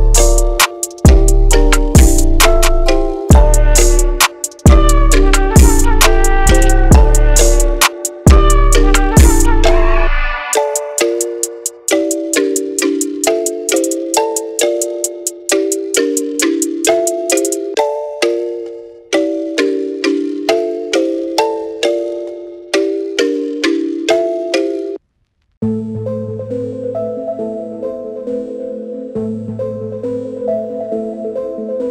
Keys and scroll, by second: 18.8-19.7 typing.